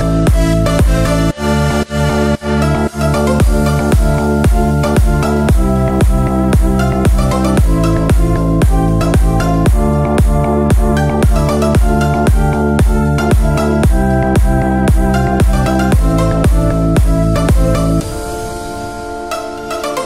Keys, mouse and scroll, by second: 1.6 click, 2.7 Tab, 3.6 scroll down 1, 4.0 shift+middle click, 4.7 shift+scroll down 1, 5.4 click, 6.0 scroll down 1, 6.9-9.7 drag, 11.7 click, 12.4 shift+click, 13.4 s, 17.1 click, 19.2 Tab, 19.7 click.